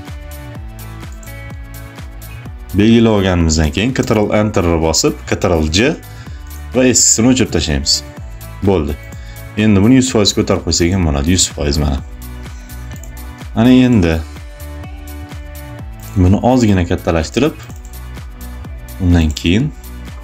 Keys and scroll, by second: 3.8 ctrl+Return, 5.3 ctrl+j, 7.2 Delete.